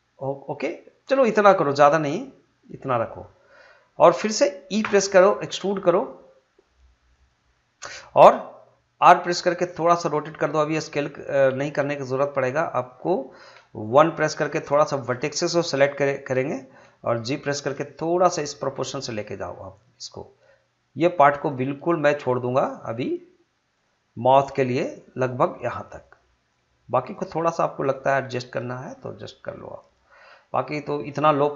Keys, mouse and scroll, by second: 3.1 click, 4.8 e, 7.1 click, 8.4 click, 9.0 r, 12.7 click, 13.9 1, 14.5-17.2 drag, 17.2 g, 19.7 click, 22.3 g, 23.7 click, 24.6 g, 26.0 click, 27.2 g, 27.9 click, 28.8 g, 29.8 click.